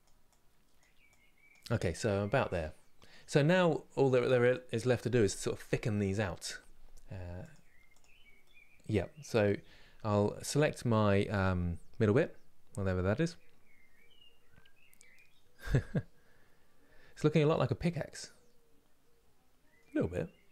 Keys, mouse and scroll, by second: 2.0-7.7 middle drag, 7.7 click, 8.1 middle click, 9.0 click, 17.2-20.5 middle drag.